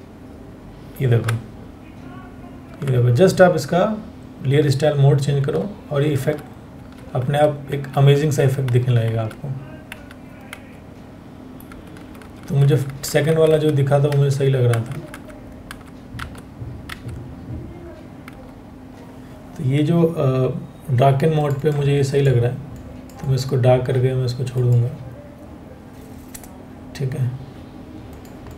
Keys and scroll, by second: 0.7 Down, 5.0 Down, 6.4 Down, 6.8 Down, 7.8 Down, 8.3 Down, 9.5 Down, 11.6 Up, 12.3 Up, 13.7 Up, 14.7 Up, 15.8 Down, 16.5 Down.